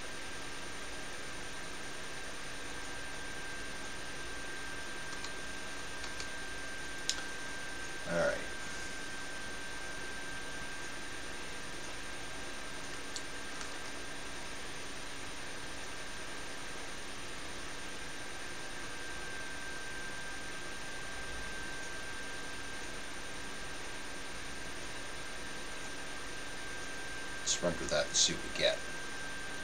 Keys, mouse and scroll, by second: 5.1 a, 6.1 a, 13.6 s, 26.8-29.6 drag.